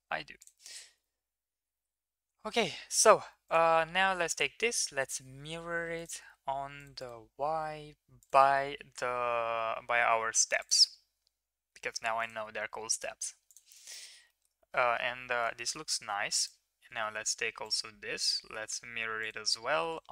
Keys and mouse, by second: 3.4 click, 4.3-6.0 drag, 6.8 click, 7.0 click, 8.2-12.3 drag, 13.5 drag, 13.8 middle drag, 14.3 middle click, 15.5 shift+middle drag, 16.0 ctrl+s, 17.6-19.3 drag, 19.3 middle drag.